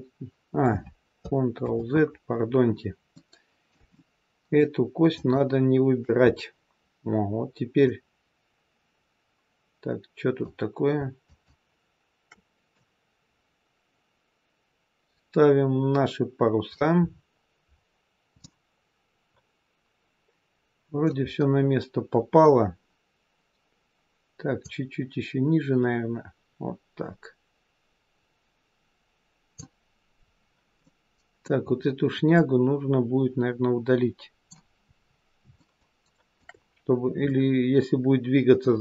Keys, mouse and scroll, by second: 1.6 ctrl+z, 3.0 middle click, 3.8 shift+middle click, 5.0 shift+click, 6.2-6.8 scroll down 2, 7.0-7.7 scroll down 1, 7.7 click, 11.1 shift+click, 12.7 click, 17.0-17.7 scroll up 4, 17.7-18.3 scroll down 2, 18.3 middle click, 21.2-21.9 scroll up 4, 30.0-30.8 scroll down 4, 30.8 middle click, 31.6-32.3 scroll up 4, 32.3 middle click, 32.3 scroll up 1, 35.3 scroll up 2, 35.4 shift+middle click, 37.2 middle click.